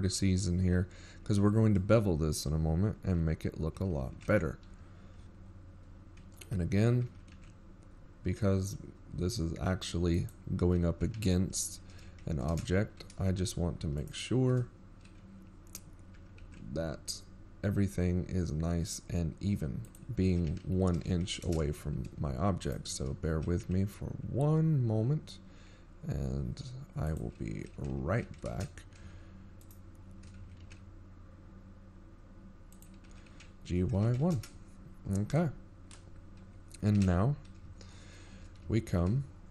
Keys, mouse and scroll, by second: 4.2 scroll down 4, 4.9 middle click, 5.5 scroll down 1, 7.7 ctrl+KP_3, 8.3 z, 9.1-9.6 ctrl+scroll up 1, 9.8-10.7 ctrl+scroll up 14, 10.7-11.4 scroll up 1, 10.7 g, 17.8 shift+right click, 20.0 g, 26.6 shift+right click, 27.2 g, 33.7 shift+right click, 34.1-34.5 shift+scroll down 4, 34.5 g, 37.2 g, 39.3-39.5 scroll down 6.